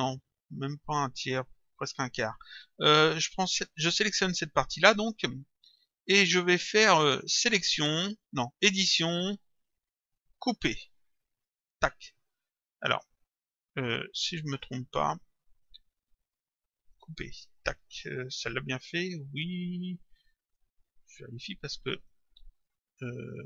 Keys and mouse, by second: 7.4 click, 11.6 click, 14.5 click, 17.2 click, 20.4 click, 21.9 click.